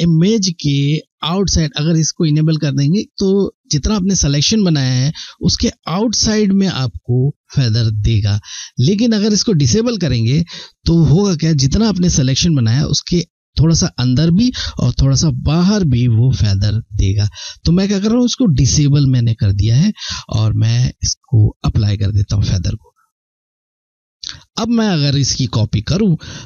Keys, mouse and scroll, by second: 22.1 click.